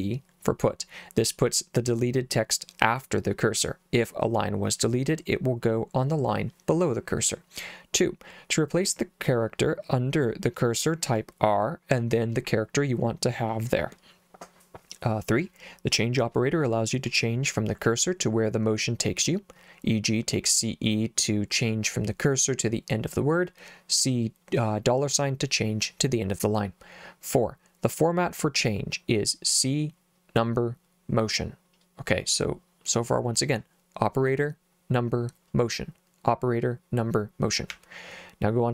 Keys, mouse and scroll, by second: 37.7 j.